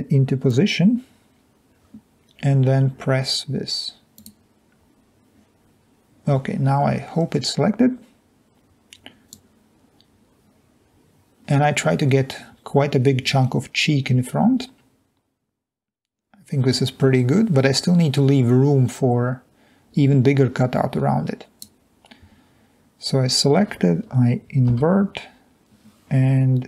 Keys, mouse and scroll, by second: 0.3 ctrl+click, 0.8 middle click, 0.8-1.8 scroll down 2, 1.8 scroll down 1, 9.3-9.7 drag, 24.8 i.